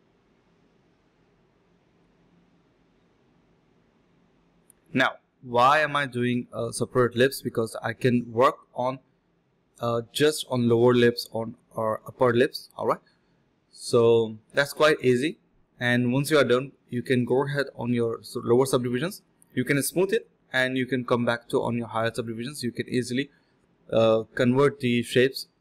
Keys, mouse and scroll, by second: 0.1-1.4 typing, 1.6 ctrl+shift+click, 1.9 ctrl+shift+z, 2.3 ctrl+shift+click, 2.8 ctrl+shift+click, 3.2 ctrl+shift+x, 3.6 ctrl+alt+shift+click, 3.9 ctrl+shift+z, 4.2 ctrl+shift+click, 4.6 ctrl+shift+q, 5.2 ctrl+shift+click, 5.8 alt+click, 5.9 alt+click, 9.9-10.6 typing, 13.1 ctrl+shift+click, 13.9 d, 14.1 shift+click, 15.0 ctrl+z, 15.1 ctrl+z, 16.2 shift+click, 16.3 shift+double click, 16.4 shift+click, 17.0 d, 17.7 ctrl+shift+click, 18.5 ctrl+shift+q, 18.8 f, 19.6 ctrl+shift+click, 19.8 ctrl+alt+shift+click, 20.3 alt+click, 20.5 alt+click, 20.6 ctrl+alt+shift+click, 21.0 ctrl+shift+click, 21.4 ctrl+z, 21.5 ctrl+shift+click, 21.6 alt+click, 21.8 alt+click, 22.1-22.6 typing, 23.1 alt+click, 23.3 alt+click, 24.1 alt+click, 24.5 alt+click, 24.7 alt+click.